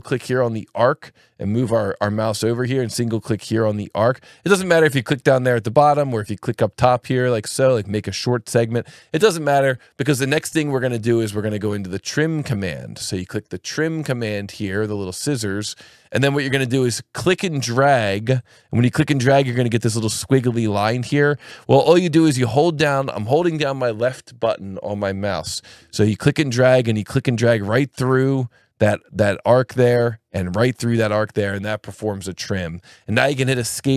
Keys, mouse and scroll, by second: 0.6 click, 3.6 click, 4.5 Escape, 5.4 click, 15.3 click, 18.4 click, 33.5 Escape.